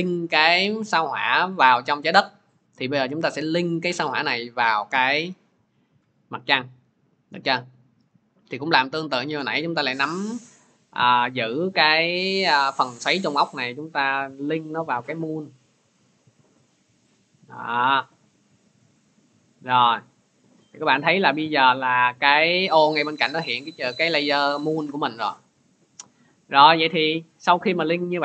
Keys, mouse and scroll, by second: 0.4 click, 2.1 click, 3.1 click, 17.9-23.0 drag, 25.8-28.2 drag.